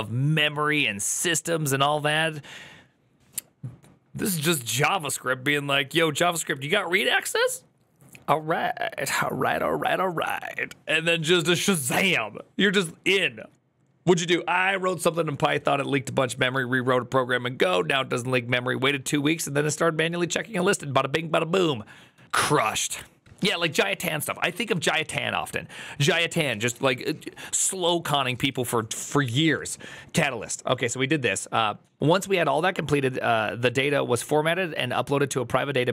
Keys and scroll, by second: 21.9 alt+[, 24.8 alt+[.